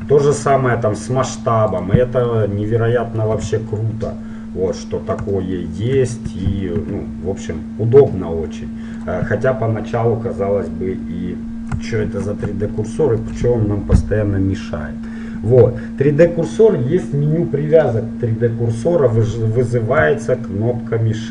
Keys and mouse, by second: 0.2 r, 3.6 KP_7, 7.1 r, 12.0 shift+c, 13.0-14.8 middle drag, 15.2-21.3 middle drag.